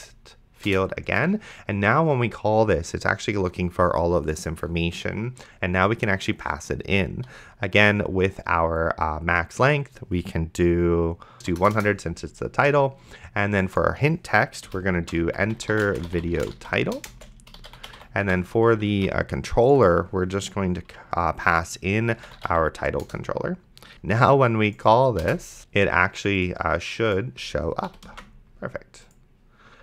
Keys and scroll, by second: 0.0-0.5 typing, 0.7 Return, 11.6 KP_0, 14.7-18.5 typing, 19.2 ctrl+z, 21.9-23.9 typing, 23.0 Return, 25.6 ctrl+s, 27.9 ,, 28.4 ctrl+s.